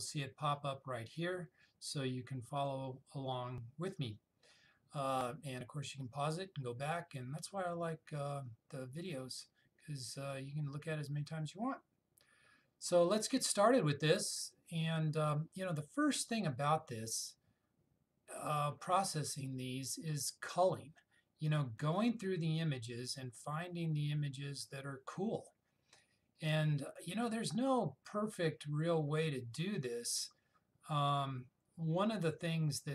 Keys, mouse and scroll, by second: 2.8 click, 16.0-16.9 scroll up 1, 18.3-20.1 scroll up 1, 20.4-22.2 scroll up 1.